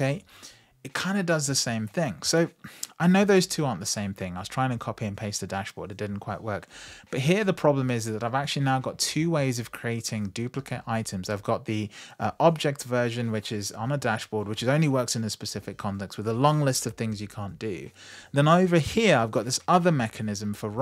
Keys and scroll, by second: 17.0 super+v.